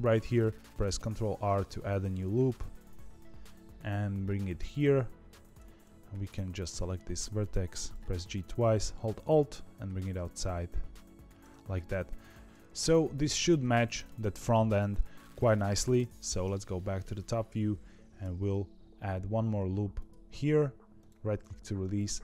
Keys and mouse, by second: 0.9 ctrl+r, 6.0 click, 7.9 g, 11.5 middle click, 12.4 KP_7, 12.4 KP_4, 12.6 middle click, 13.7 middle click, 15.9 KP_7, 16.7 shift+middle click, 18.1 ctrl+r, 22.0 click.